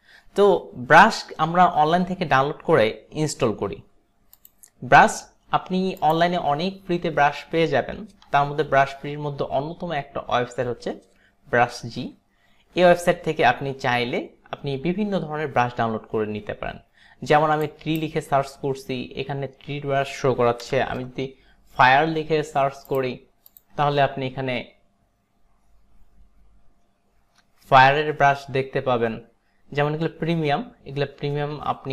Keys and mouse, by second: 4.4 click, 6.1 click, 17.7 click, 20.8 BackSpace, 21.0 f, 23.0 click, 23.6 click.